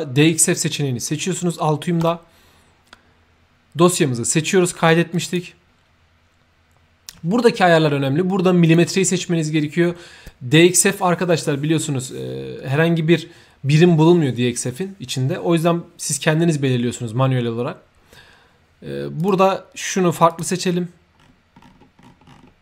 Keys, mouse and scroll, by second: 1.9 click, 5.1 click, 8.6 click, 19.2 click, 20.3 click, 21.1-22.2 scroll up 2, 22.2-22.6 scroll down 1.